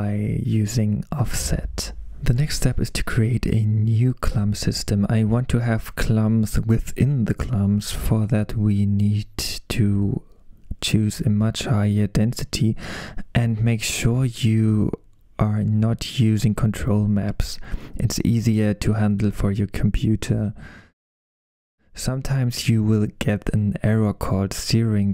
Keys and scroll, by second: 0.2 Return, 20.0-20.8 typing.